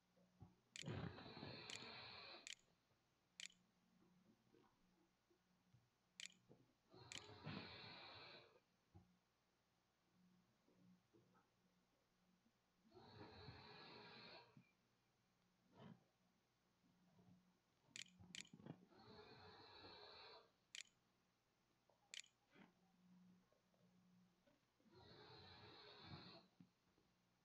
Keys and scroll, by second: 0.0-1.7 typing, 2.7 ctrl+x, 2.7 ctrl+c, 3.2 ctrl+v, 4.3-5.1 typing, 6.7 ctrl+s, 7.4 a, 16.3-17.2 typing, 17.5 Delete, 18.1 Delete, 18.3-19.6 typing, 21.9 ctrl+s, 22.4 a.